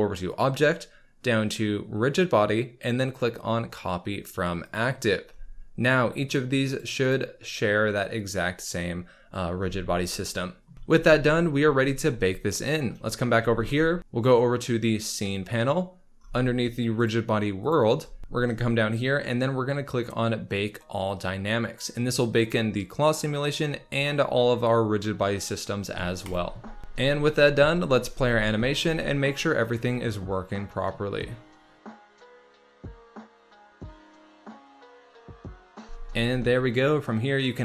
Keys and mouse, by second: 0.4-4.7 drag, 13.3 ctrl+s, 16.9 click, 17.6 click, 26.2-27.7 drag, 26.6 ctrl+s, 26.6 alt+a, 28.1 space, 35.9 space.